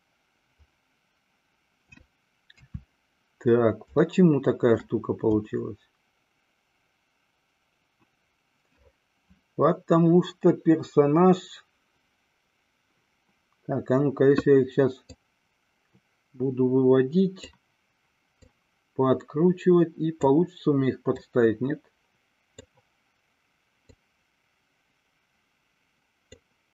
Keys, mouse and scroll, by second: 2.8 KP_3, 4.3-5.0 shift+middle drag, 15.1-17.6 drag, 18.6-20.5 drag, 21.5-22.9 drag, 24.0-26.5 drag.